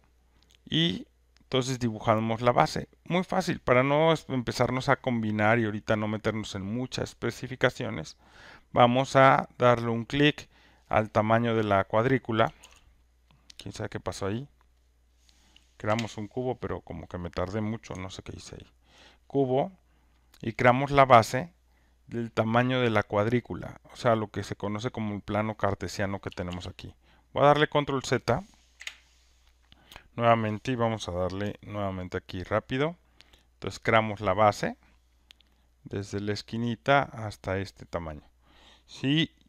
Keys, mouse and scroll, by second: 11.6 click, 12.6 ctrl+z, 13.3 click, 15.0 click, 15.8 Delete, 18.9 click, 24.8 click, 26.5 ctrl+z, 27.4 click, 28.7 Delete, 32.4 click, 37.4 click.